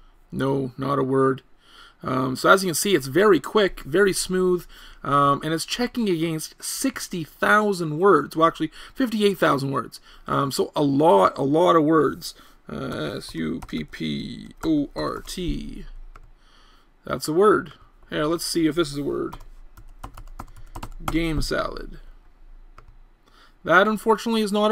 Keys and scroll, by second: 0.8 BackSpace.